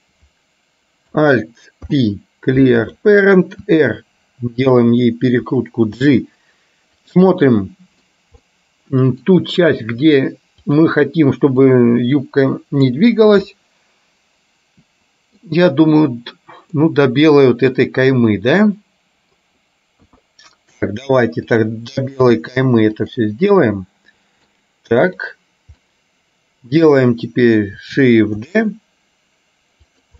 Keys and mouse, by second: 1.9 alt+p, 3.8 r, 6.1 g, 7.4 middle click, 8.6 middle click, 10.8 click, 11.8-12.9 drag, 13.6-15.4 middle drag, 16.9-19.4 middle drag, 20.1 KP_1, 21.6 click, 22.3 g, 23.7 middle click, 25.2 click, 25.9-26.9 middle drag, 28.6 shift+d.